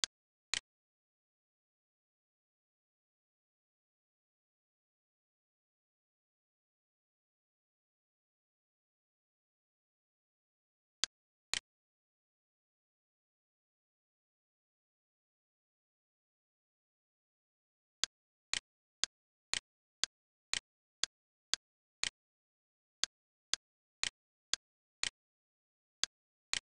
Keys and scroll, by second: 1.3 2, 1.7 ., 2.7 2, 3.6 0, 4.1 6, 4.9 Return, 12.3 4, 13.0 Return, 16.9 e.